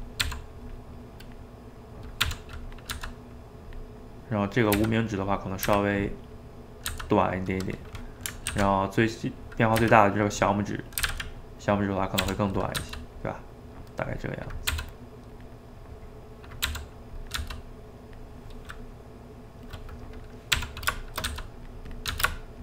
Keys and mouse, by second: 0.2 r, 0.9-2.2 middle drag, 2.2 r, 2.9 g, 3.9 middle click, 4.7 s, 5.7 s, 6.3 middle click, 6.9 g, 7.9 middle click, 8.5 alt+d, 9.3 middle click, 9.8 s, 10.5 middle click, 11.0 s, 12.2 r, 12.8 g, 13.3-14.7 middle drag, 14.7 r, 15.5-16.6 middle drag, 16.6 r, 17.4 g, 18.4-19.7 middle drag, 19.7 click, 19.9 middle click, 20.6 r, 21.3 g, 22.0 click, 22.1 g.